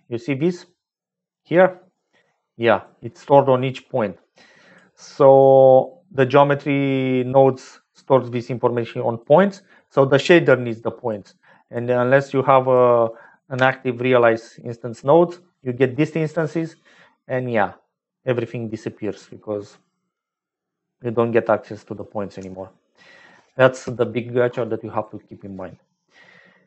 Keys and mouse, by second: 1.5 middle click, 2.7-5.2 drag, 8.7 click, 11.0 click, 12.2 click, 13.5 m, 21.1 click, 22.7 m.